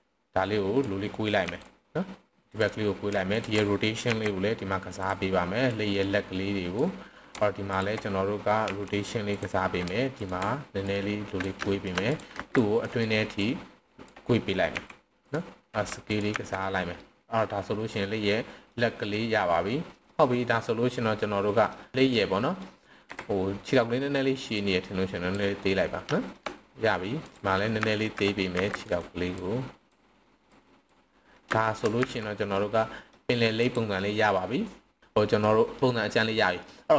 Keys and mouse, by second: 1.5 r, 2.5 click, 4.1 r, 5.0 drag, 5.7-6.7 drag, 7.6 alt+click, 8.7 r, 9.3 click, 10.1 alt+click, 10.8-11.4 drag, 11.6 shift+middle drag, 12.3 c, 12.9 right drag, 13.4-14.0 drag, 14.7 r, 15.2 drag, 15.7 s, 16.1 click, 16.3 z, 17.0-18.7 middle drag, 20.0-20.7 middle drag, 20.0 s, 20.0 z, 21.2-21.7 middle drag, 22.0-22.6 middle drag, 23.0 KP_7, 24.6-25.3 drag, 26.1 shift+middle click, 27.2 click, 27.7 z, 28.6 c, 28.9 right click, 29.3-29.9 drag, 30.5 click, 31.5 shift+middle click, 32.0 z, 32.5-33.1 middle drag, 34.0-34.4 middle drag, 35.4-35.7 middle drag, 36.0-36.6 middle drag.